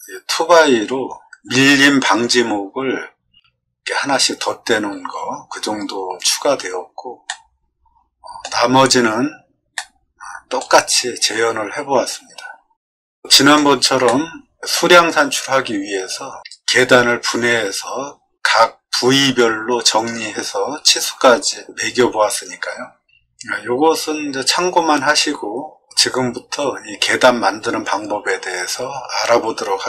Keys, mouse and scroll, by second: 6.1 click, 7.2-8.3 middle drag, 9.7 shift+middle click, 12.7 middle click, 14.0 middle click.